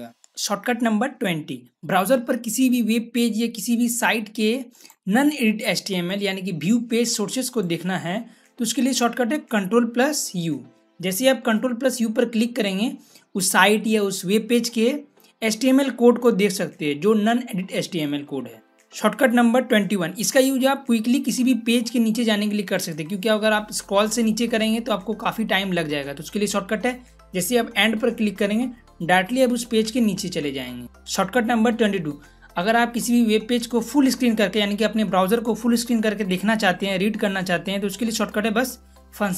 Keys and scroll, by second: 10.2 ctrl+u, 27.7 End.